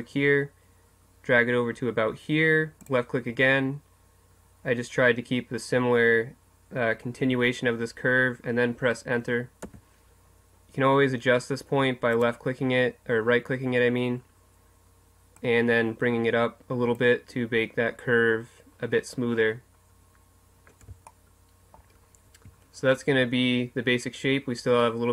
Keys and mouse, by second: 12.2-19.3 drag, 19.3 middle click, 21.1-22.3 middle drag, 22.3 Tab.